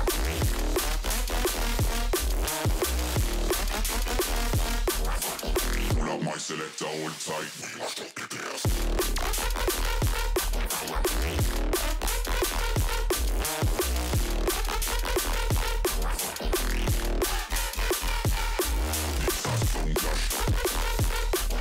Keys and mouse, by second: 0.5-3.0 drag, 13.6-15.9 drag, 17.4-18.5 drag, 21.4 click.